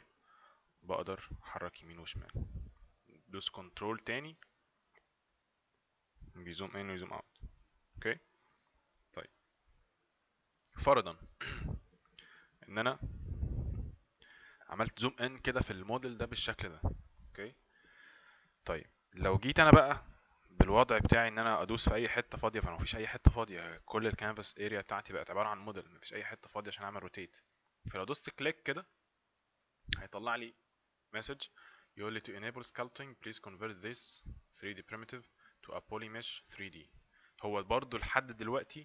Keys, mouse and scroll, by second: 12.1 ctrl+right click, 28.3 click.